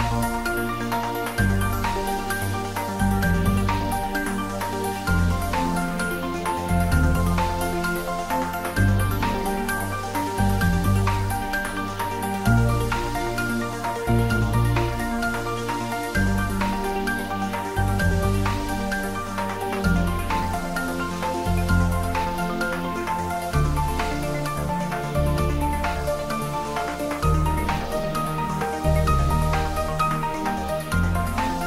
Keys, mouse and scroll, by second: 0.5 click, 1.0 click, 1.9 shift+middle click, 2.4 ctrl+middle click, 2.7-3.7 typing, 5.6 click, 5.7-6.7 typing, 8.0 click, 9.0 Tab, 10.1 click, 10.6 g, 11.4 click, 11.5 Tab, 11.7 shift+z, 12.7 g, 13.2 click, 13.4 Tab, 13.8 g, 15.2 click, 15.3 Tab, 15.7 shift+middle click, 16.0 Tab, 18.3 1, 18.7 shift+click, 20.3 shift+click, 20.8 s, 22.0-23.4 typing, 22.3 click, 24.6 click, 26.6 g, 28.7 click, 30.4 g, 31.3 click.